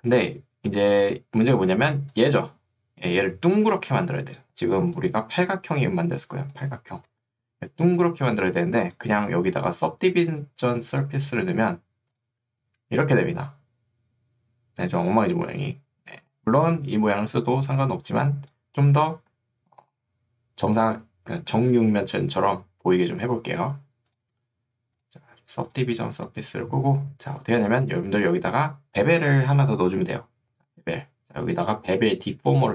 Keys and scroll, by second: 0.9 3, 1.7 ctrl+2, 7.1 Escape, 15.7 3.